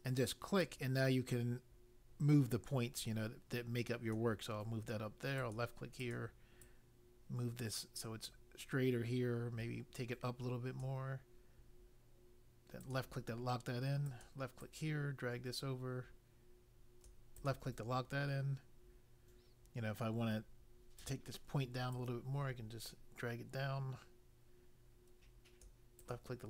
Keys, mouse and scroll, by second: 0.6 click, 5.3 click, 5.9 click, 6.6 click, 12.8 click, 14.0 click, 14.5 click, 17.4 click, 21.0 click, 21.9 click, 26.0 click.